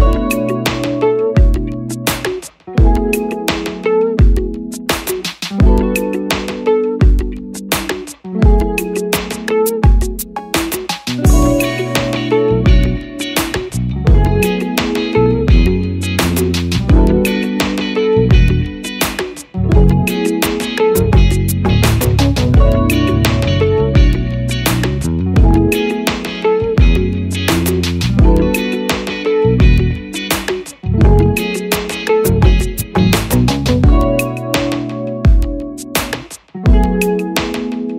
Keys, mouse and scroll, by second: 5.4 double click, 22.4 double click.